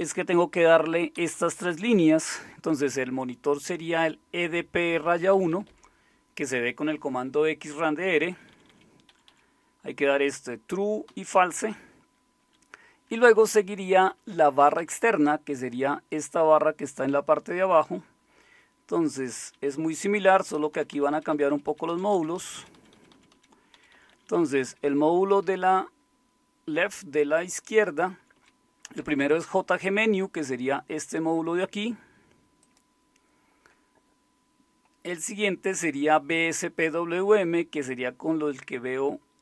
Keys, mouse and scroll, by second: 0.0 Down, 0.5 Up, 1.1 Down, 1.1-2.0 typing, 1.8 Up, 4.9 Left, 5.3-5.7 typing, 8.3 Down, 8.3-9.3 typing, 11.1-12.5 typing, 13.2 Up, 13.4 Up, 13.5 Up, 13.7 Up, 13.9 Up, 14.1 Up, 14.6 Down, 14.8 Down, 18.3-19.5 Down, 20.0 Down, 20.2 Down, 20.5 Down, 20.7 Down, 20.9 Down, 21.5 Down, 21.8 Down, 21.9 Down, 22.4 Down, 22.5 Down, 22.7 Down, 22.9 Down, 23.4 Down, 23.7 Up, 23.9 Up, 24.1 Up, 24.3 Up, 24.4 Up, 25.6-28.2 Right, 31.0-34.0 drag.